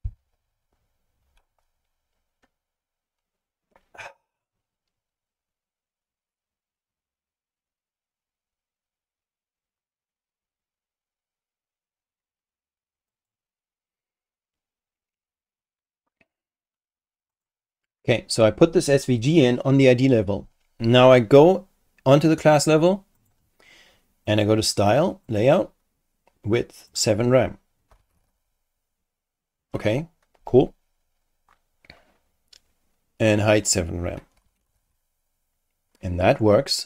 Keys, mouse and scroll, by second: 13.1 click, 17.3 click, 22.1 click, 23.2 click, 24.3 click, 25.3 click, 26.9 click, 27.6-28.8 typing, 31.0-31.3 scroll down 2, 33.5 click, 34.1-35.2 typing.